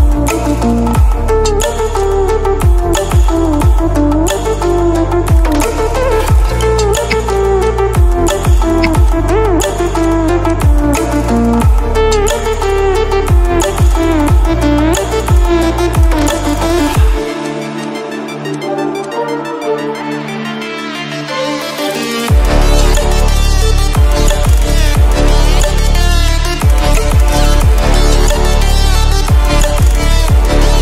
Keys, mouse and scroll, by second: 7.0 i, 7.6 click, 8.7 v, 9.0-12.0 drag, 13.8-16.3 alt+drag, 27.0 shift+click.